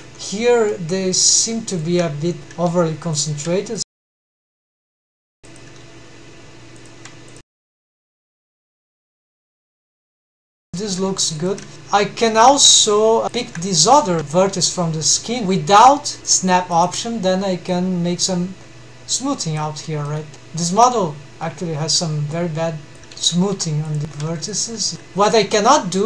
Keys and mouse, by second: 0.7 middle click, 1.9 click, 2.0 g, 4.4 g, 5.6 click, 5.8 g, 7.4 click, 7.6 shift+g, 8.2 shift+click, 9.2 g, 10.4 click, 10.6 shift+g, 11.0 shift+click, 11.7 alt+shift+2, 13.4 1, 15.7 click, 18.6 middle click, 19.2 alt+a, 20.5 click, 23.0 3, 24.7 c, 24.9 g, 25.2 alt+a, 25.7 c.